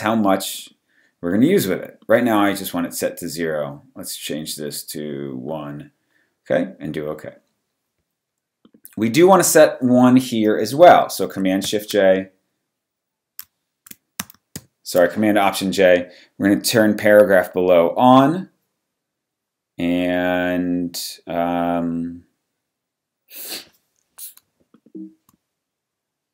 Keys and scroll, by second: 11.6 shift+super+j, 13.0 shift+super+j, 14.6 alt+super+j.